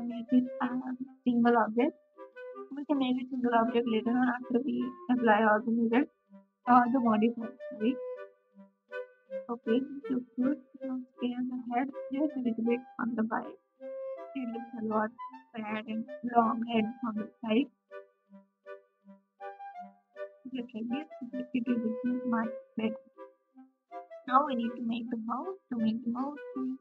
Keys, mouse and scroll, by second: 0.5 KP_Subtract, 26.5-26.8 drag, 26.5 g.